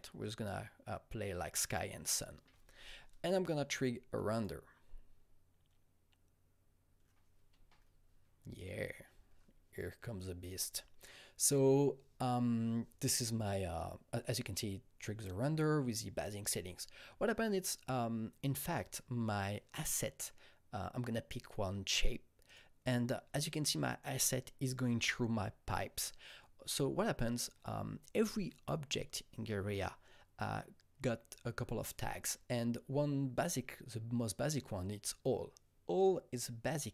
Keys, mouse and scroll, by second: 4.3-14.1 shift+drag, 22.4 click.